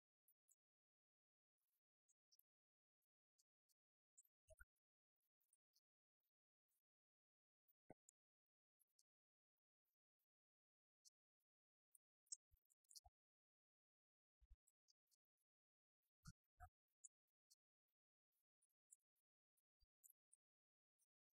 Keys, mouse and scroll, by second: 3.4-4.5 drag, 9.1-10.9 drag.